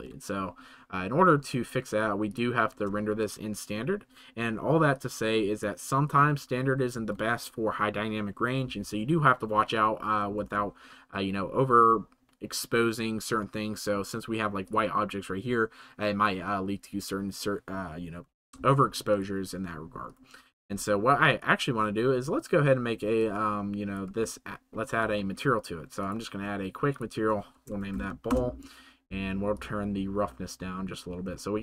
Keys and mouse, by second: 2.3-4.7 drag, 4.9-5.6 middle drag, 6.9 ctrl+s, 18.4 z, 19.0 click, 21.3 middle drag, 21.6-24.0 drag, 27.2-31.2 shift+drag.